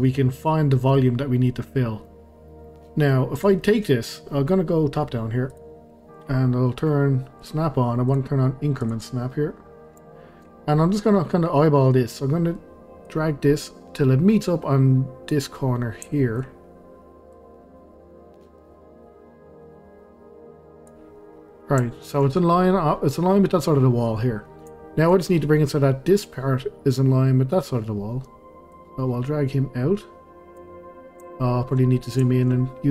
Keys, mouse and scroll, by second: 2.3 scroll down 2, 2.5-2.9 middle drag, 2.9-3.4 scroll up 2, 3.4 drag, 3.6-5.5 middle drag, 5.5 click, 7.4 click, 8.1-9.7 drag, 9.7-10.1 scroll up 1, 10.1-10.9 shift+middle drag, 10.9-12.8 scroll up 1, 13.1 click, 15.6-15.9 scroll up 1, 16.1-16.5 shift+middle drag, 16.5-17.2 scroll up 1, 17.3 click, 21.1-21.9 scroll up 1, 21.9-23.8 shift+middle drag, 23.8-24.1 scroll down 1, 24.8-28.7 shift+middle drag, 28.7 click, 30.9-31.2 scroll up 1, 31.3-32.0 shift+middle drag, 32.0 scroll up 1, 32.3-32.9 shift+middle drag.